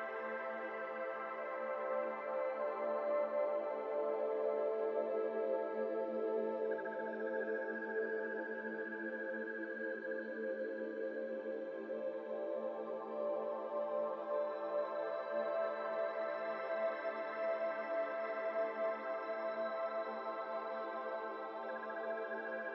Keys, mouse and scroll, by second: 0.1 click, 0.4 middle click, 0.9-1.4 scroll down 3, 1.0-1.3 middle drag, 1.4-2.5 middle drag, 2.5-3.0 scroll up 2, 3.0 scroll down 2, 3.2-3.6 shift+middle drag, 3.6 click, 4.1 click, 6.1 click, 6.5 scroll down 1, 6.6-8.4 middle drag, 8.4 click, 8.7-9.2 scroll down 2, 8.7 middle click, 9.2-9.7 middle drag, 9.7 scroll up 1, 9.8-12.8 middle drag, 12.8-19.4 drag, 21.7-22.1 middle drag, 22.1 shift+a.